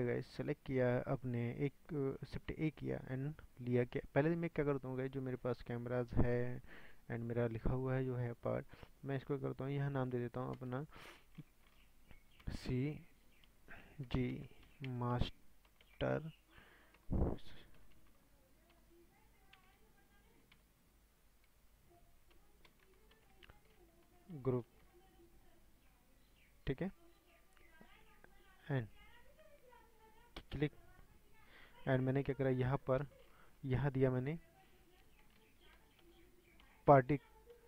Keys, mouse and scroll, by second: 0.0 click, 1.2 click, 9.6-25.8 drag, 29.3-31.1 right drag, 31.1 click, 32.0-37.6 drag.